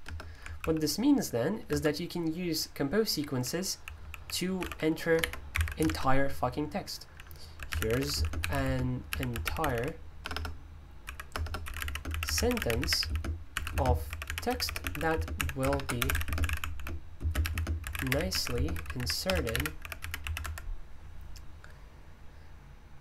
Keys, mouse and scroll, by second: 0.0 BackSpace, 0.5 super+l, 1.7 Escape, 2.6-20.9 typing.